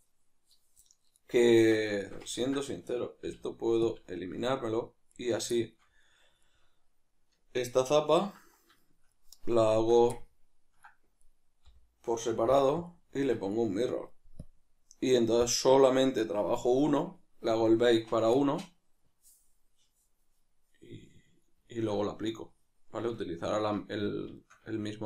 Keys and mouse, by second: 1.6 Tab, 3.2 x, 5.1 right click, 5.5-11.2 shift+middle drag, 9.7 Tab, 11.2 right click, 13.5 right click, 14.5-18.4 drag, 18.4-25.0 middle drag.